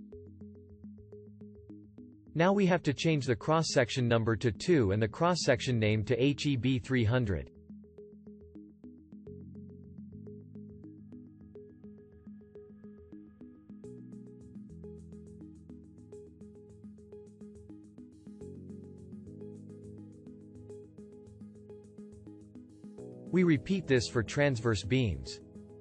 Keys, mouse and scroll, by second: 14.0-17.5 shift+drag.